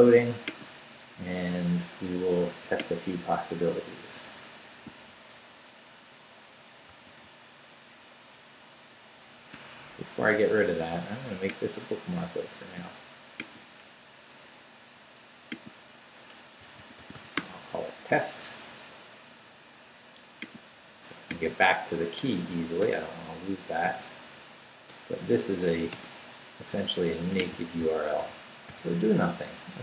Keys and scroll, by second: 6.9 super+x, 9.5 Escape, 16.3-17.6 typing, 22.8 BackSpace, 24.9 BackSpace, 25.9 Return, 27.8 super+r.